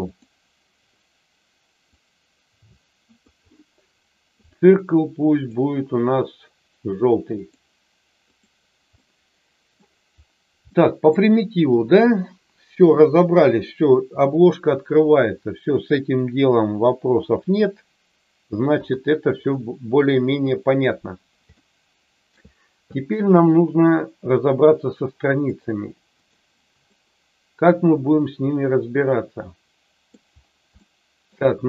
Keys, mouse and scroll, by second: 0.0 click, 1.8-3.2 drag, 5.3-7.6 drag, 8.2 click, 8.9 middle click, 10.6 middle click, 17.1 KP_7, 18.7 KP_3, 20.2 KP_1, 21.4 shift+middle click, 25.4 click, 27.0-30.1 middle drag, 30.8 shift+middle click.